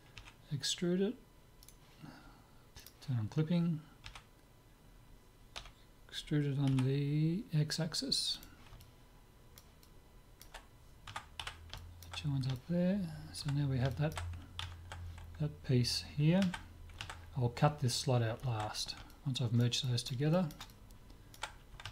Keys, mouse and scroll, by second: 0.3 e, 2.8-4.5 drag, 4.1 e, 8.8-11.1 middle drag, 11.1 Tab, 11.5 z, 11.8-14.9 middle drag, 14.6 alt+Tab, 17.0 alt+Tab.